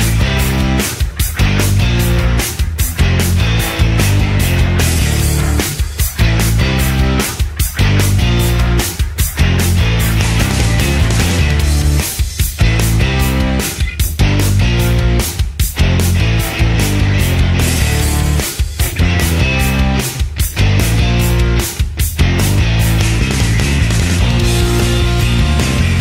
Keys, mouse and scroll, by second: 25.8 r.